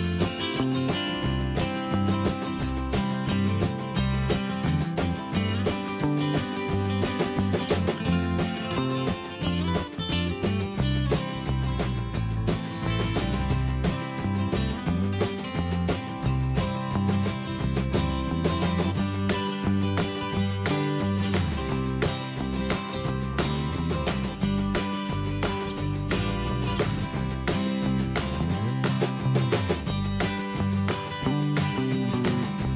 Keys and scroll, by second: 0.8 ctrl+g, 2.0 Up, 4.4 ctrl+g, 8.3 ctrl+c, 8.8 ctrl+f, 12.5 alt+Right, 16.2 alt+Tab, 17.8 ctrl+c, 19.0 ctrl+a, 20.3 Escape, 28.1 alt+Down, 28.4 Up.